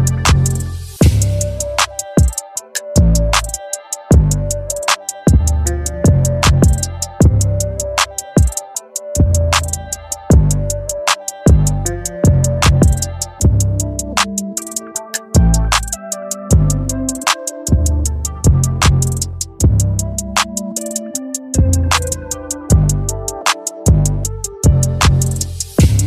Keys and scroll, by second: 4.9 [, 21.9 [.